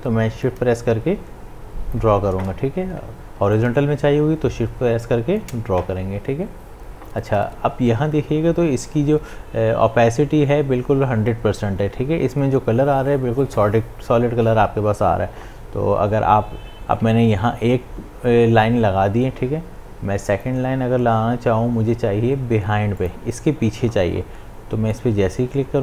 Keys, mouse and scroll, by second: 3.6-8.1 drag, 20.2 click, 23.0-25.8 drag.